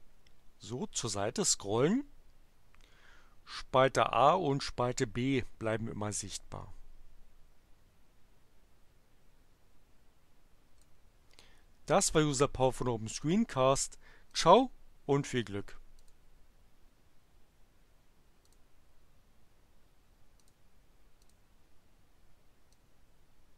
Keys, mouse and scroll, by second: 12.0 click, 13.2 click, 14.3 click, 15.9 click, 18.4 click, 20.3 click, 21.2 click, 22.7-23.5 drag.